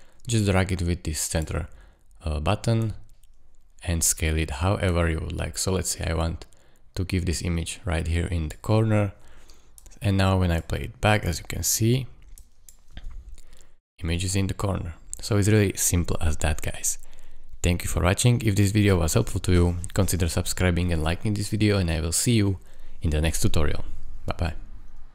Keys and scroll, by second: 12.9 space, 20.2 space.